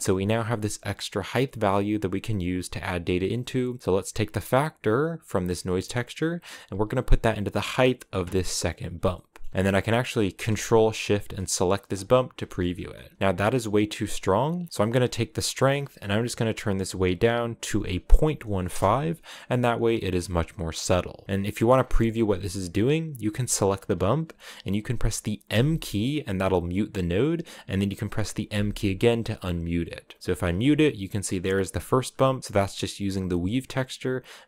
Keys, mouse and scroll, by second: 2.0 click, 4.2-8.6 drag, 9.7-11.8 drag, 12.2 shift+middle click, 12.3-12.7 scroll up 6, 14.3-15.2 scroll up 3, 15.2-18.5 drag, 19.9 scroll down 3, 20.4 scroll up 3, 21.0 shift+middle click, 21.2 scroll up 2, 21.4 scroll down 4, 21.7-25.2 shift+middle drag, 25.2 m, 26.2 scroll down 2, 27.2-28.2 drag, 28.2 m, 29.2 middle click, 29.2 scroll up 4, 30.2 m, 31.1-32.0 scroll up 3.